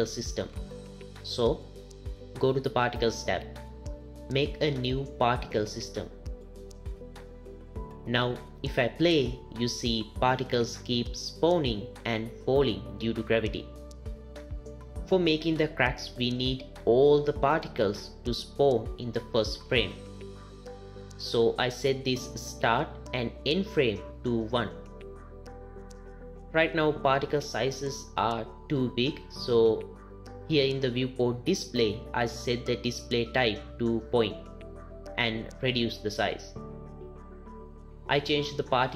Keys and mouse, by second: 0.0 click, 3.4 click, 6.1 click, 10.6 space, 12.0 space, 23.3 click, 31.1 click, 36.3 click, 38.8 click.